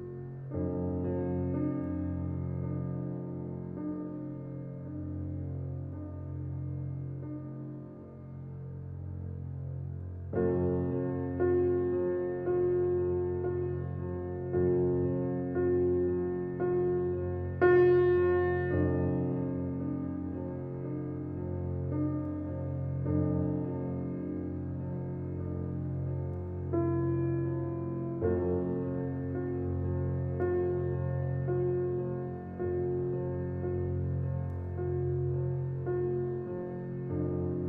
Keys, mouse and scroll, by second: 0.1 click, 0.6 click, 2.5-3.7 drag, 9.7 middle click, 10.5 click, 10.9 click, 12.3-13.8 middle drag, 13.9 click, 14.4 shift+click, 14.7 middle click, 15.6 e, 17.9 alt+click, 18.4 alt+click, 19.3 alt+e, 22.3 alt+middle click, 23.9 s, 27.9 middle click, 28.6 click, 29.1 click, 31.5 Tab, 31.8 alt+middle click, 32.0 alt+middle click, 32.3-32.7 scroll up 1, 32.7 g, 34.3-35.0 middle drag, 35.0 scroll down 3, 35.2-35.9 middle drag, 35.9 g, 37.5-37.6 middle drag.